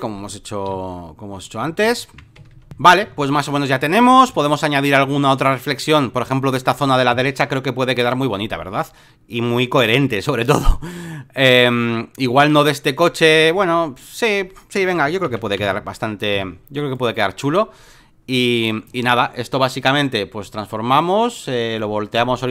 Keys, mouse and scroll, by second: 0.7 ctrl+f, 1.9 alt+middle click, 1.9 alt+scroll, 2.4 Escape, 3.1 alt+middle click, 4.1 space, 5.0-7.4 drag, 8.0-10.1 drag, 10.5-14.2 drag, 15.6 ctrl+v, 16.3 v, 16.9-22.5 drag.